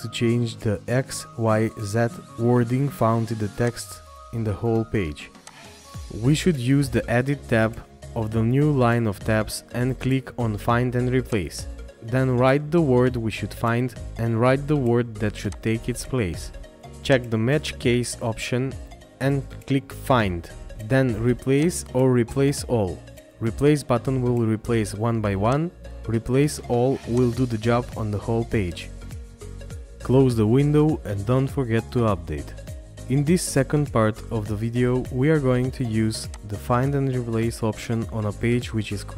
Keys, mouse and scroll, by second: 32.5 scroll down 1, 35.0 scroll up 1, 35.8 scroll up 1.